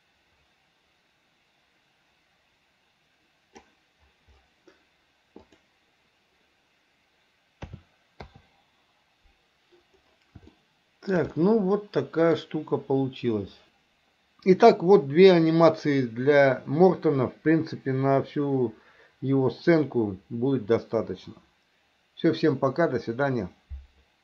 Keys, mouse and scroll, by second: 5.7 click, 7.9 a, 8.5 i, 10.7 shift+middle click, 11.5-12.6 middle drag.